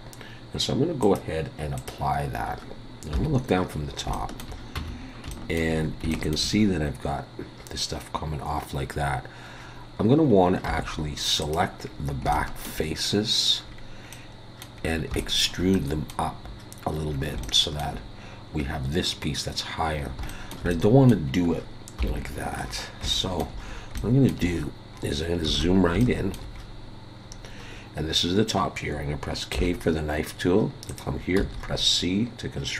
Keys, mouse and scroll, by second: 1.0 click, 3.1 KP_7, 3.9 scroll up 3, 4.1 shift+middle click, 4.8 Tab, 5.0 scroll up 2, 5.3 shift+middle click, 5.8 scroll up 1, 6.1 shift+middle click, 6.5 scroll up 1, 9.0 scroll up 3, 9.6-10.7 scroll down 4, 10.7 3, 11.4 click, 11.8 scroll down 2, 12.3 shift+middle click, 13.8 scroll down 1, 14.1 middle click, 14.8 scroll down 3, 15.2 shift+middle click, 15.7 middle click, 17.1 scroll down 3, 17.4 shift+middle click, 19.9 scroll down 2, 20.3 shift+middle click, 20.7 middle click, 22.0 KP_7, 22.6 scroll up 6, 23.1 shift+middle click, 23.4-23.7 shift+scroll up 3, 24.0 shift+middle click, 24.5 scroll up 2, 25.7 alt+a, 25.8 scroll down 3, 26.0 shift+middle click, 26.5 scroll up 2, 27.2 scroll up 2, 29.5 k.